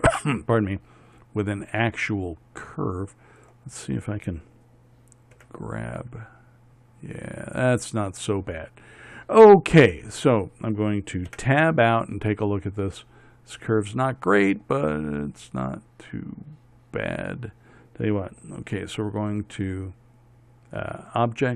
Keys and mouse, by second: 5.9 g, 11.8 Tab.